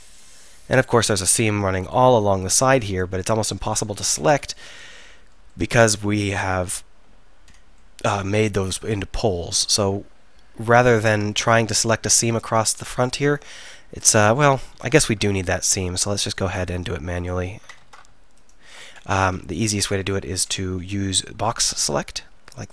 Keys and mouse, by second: 3.9 ctrl+z, 4.1 ctrl+z, 13.5 click, 17.9 ctrl+z, 19.2 ctrl+z, 19.6 KP_1, 20.0 KP_3.